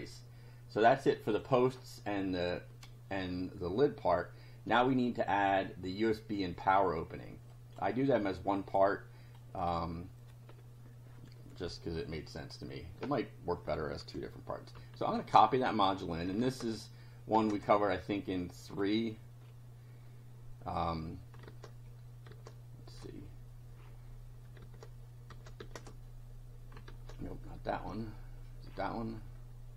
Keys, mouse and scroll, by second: 7.5 click, 8.3-9.5 drag, 15.3 alt+Tab, 16.5 alt+Tab, 17.4 alt+Tab, 18.7 click, 19.4 scroll down 2, 21.5 alt+Tab, 22.4 alt+Tab, 23.7-24.1 scroll down 2, 24.7 alt+Tab, 26.9 alt+Tab, 28.7 scroll down 2.